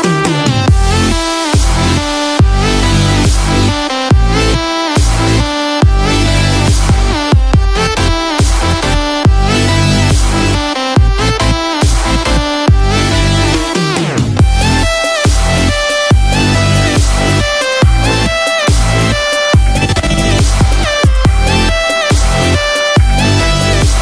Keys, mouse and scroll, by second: 4.9 click.